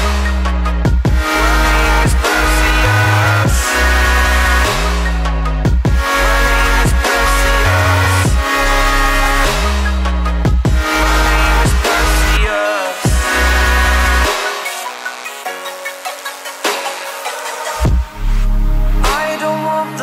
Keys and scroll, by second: 6.8 ctrl+u.